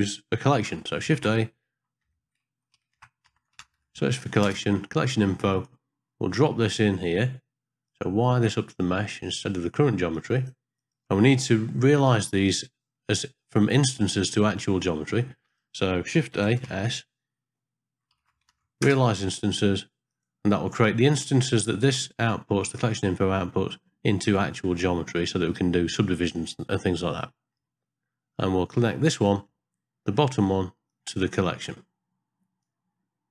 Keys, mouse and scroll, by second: 1.3 shift+s, 2.9 shift+a, 3.9 l, 7.9 click, 8.0-9.3 drag, 10.1 click, 10.8 click, 12.1 click, 15.5 click, 16.3 shift+a, 21.3-22.8 drag, 27.2 middle click, 29.3 middle click, 30.9-32.6 drag.